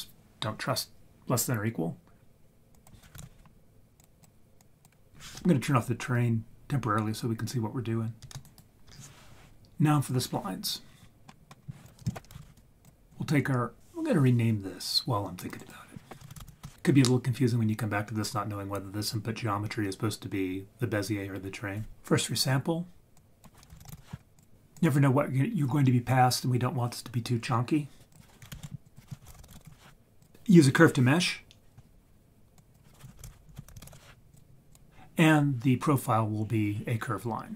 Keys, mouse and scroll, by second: 2.7-4.0 drag, 4.6 click, 5.1 right click, 8.3 ctrl+z, 8.4 ctrl+right click, 9.5 scroll up 1, 10.9 scroll down 5, 11.2 middle click, 11.6 scroll up 3, 11.8 click, 12.0 shift+a, 13.3 scroll up 2, 15.6 click, 23.1-24.4 drag, 24.7 click, 28.1 click, 28.5 typing, 29.1-30.2 drag, 32.6-34.3 drag, 34.7 click, 37.1-37.5 scroll down 5.